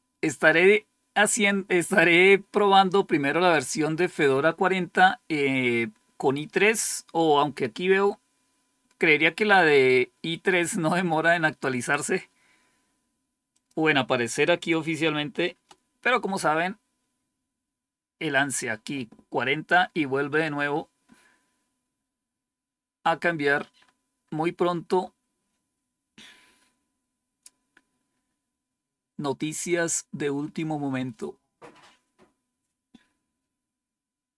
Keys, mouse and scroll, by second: 13.4 click, 16.0 F5, 22.1-22.8 scroll down 2, 23.7-24.3 scroll up 3, 24.8-34.3 scroll up 1, 34.3 click.